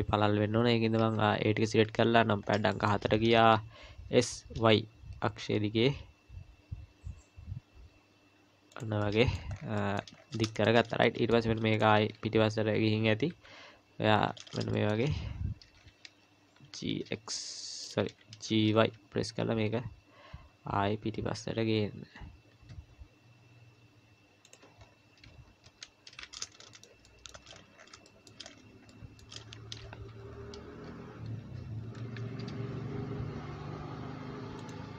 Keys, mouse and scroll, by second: 0.1-1.8 scroll up 2, 1.8 KP_7, 2.4 scroll up 2, 2.7 shift+middle click, 3.3 scroll up 1, 4.1 s, 9.0 middle click, 9.5-10.5 scroll down 6, 9.8 middle click, 10.5 shift+middle click, 10.8-11.7 scroll up 3, 11.0 middle click, 11.7 click, 12.0 KP_1, 12.6 KP_Decimal, 13.3 KP_3, 14.4 scroll up 3, 14.7 shift+middle click, 15.0-16.3 scroll up 3, 16.5 g, 18.4 g, 24.8-25.7 scroll up 1, 25.7 scroll up 4, 25.7 z, 26.7 shift+middle click, 27.0 shift+middle click, 27.5-30.4 scroll up 16, 28.1 shift+middle click, 28.9 shift+middle click, 30.8 scroll down 1, 30.9 scroll down 1, 31.4 g.